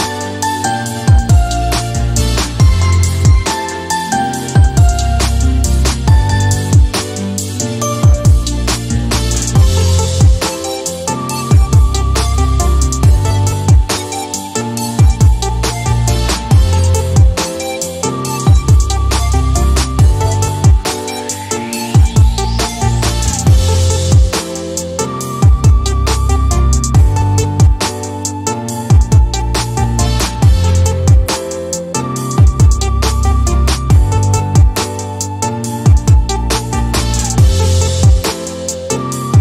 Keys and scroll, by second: 2.2 e, 6.0 typing, 7.5-9.0 typing, 9.6 Return, 20.5 p, 20.8 Return, 37.4 d.